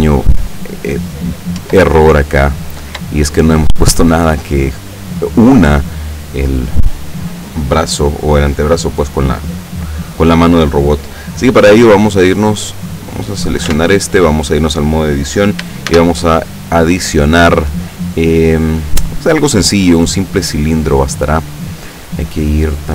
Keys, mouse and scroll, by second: 1.1 scroll down 2, 1.7 Tab, 2.5 scroll up 2, 3.2 shift+right click, 13.3 right click, 13.7 Tab, 15.9 shift+a, 19.7 click, 22.7 click.